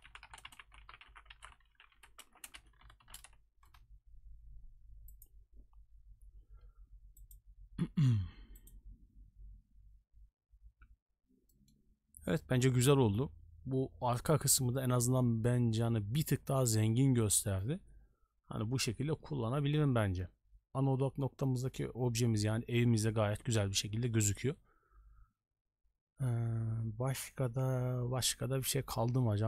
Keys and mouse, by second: 11.5 middle drag.